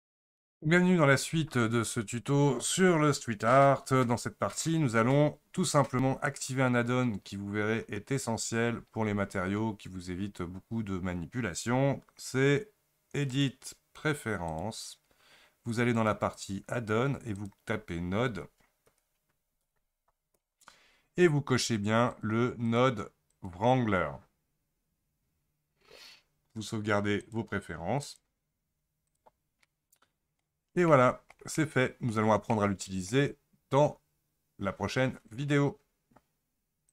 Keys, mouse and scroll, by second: 14.9-18.5 drag, 29.7-36.9 middle drag.